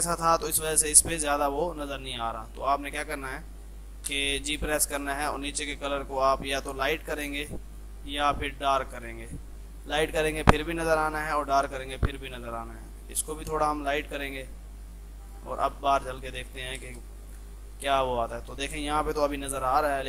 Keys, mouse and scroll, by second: 0.8 shift+F2, 0.9 ctrl+click, 2.2 F3, 3.0 click, 4.1 g, 5.2-15.3 drag, 16.9 space, 17.3 ctrl+click, 17.7 shift+F2.